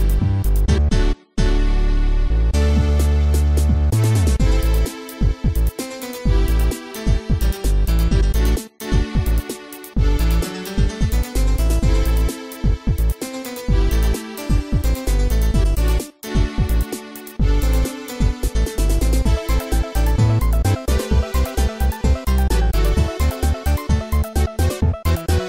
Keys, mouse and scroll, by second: 1.3 click, 3.4 click, 4.0 click, 4.1 click, 4.7-5.3 typing, 6.4 scroll down 1, 12.5 scroll up 1, 15.1 click, 15.6 Tab, 16.0 click, 22.1 Tab, 23.7 click, 24.5 ctrl+z.